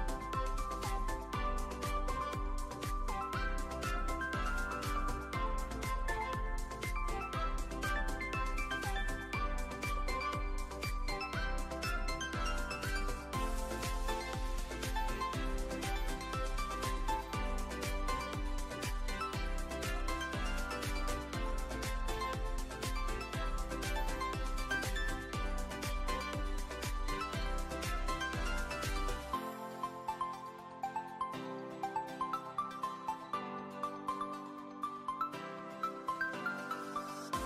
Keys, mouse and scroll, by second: 0.6 click, 0.8 `, 1.8 `, 2.9 click, 4.7 g, 7.6-9.2 middle drag, 9.6 \, 11.3 ctrl+`, 12.8 ctrl+s, 13.5 click, 13.9 click, 14.9 click, 16.1 shift+a, 17.9 q, 18.9 shift+middle click, 19.4 middle click, 20.1 shift+middle click, 21.2 q, 23.7 ctrl+s, 25.4 drag, 26.1-26.7 drag, 27.2 ctrl+s, 27.5 middle click, 27.9 drag, 29.1 drag, 29.9 click, 35.6 click, 36.4 click, 37.0 drag.